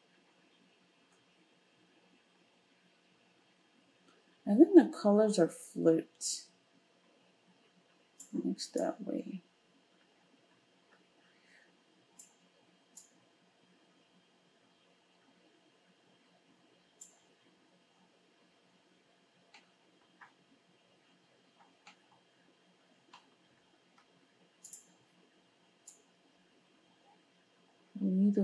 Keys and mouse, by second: 24.7-28.4 middle drag.